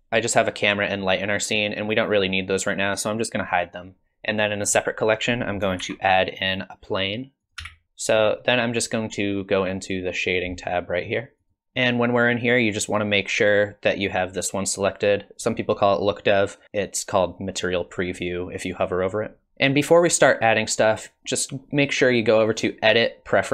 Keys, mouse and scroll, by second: 3.7 click, 4.6 click, 5.2 click, 5.8 shift+a, 7.8 click, 19.5 click, 22.5 click.